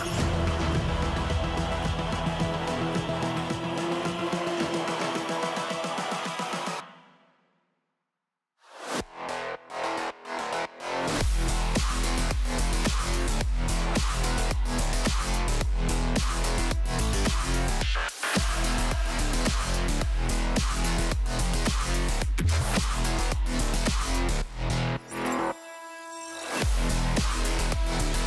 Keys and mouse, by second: 2.0-4.5 drag, 5.6 click, 7.0 click, 8.8 middle drag, 9.1 g, 11.9 middle drag, 15.1 ctrl+2, 15.1-17.8 middle drag, 15.1 g, 17.8 click, 18.6 Tab, 19.2 click, 19.7 shift+click, 20.2 click, 21.7 g, 23.3 x, 23.5 x, 23.8 Tab, 24.6 Tab, 27.0 g, 27.8 x, 27.8 x.